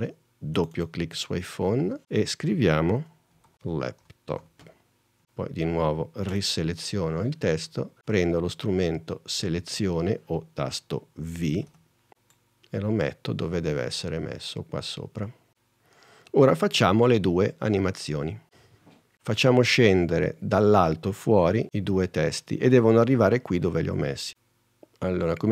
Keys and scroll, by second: 3.3-5.2 typing, 11.7 v.